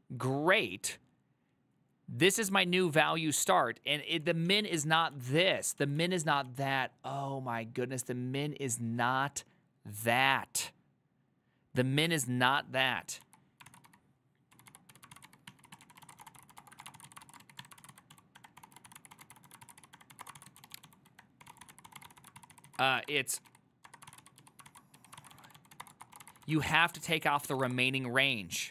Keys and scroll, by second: 4.4-5.2 typing, 13.7-28.2 typing, 27.1 ctrl+c.